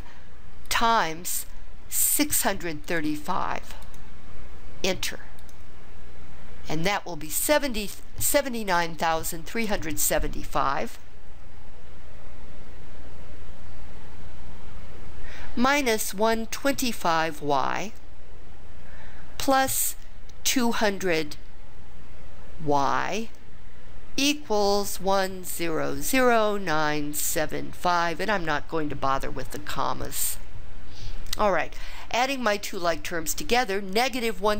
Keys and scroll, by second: 2.2 6, 2.9 3, 3.9 5, 5.5 Return.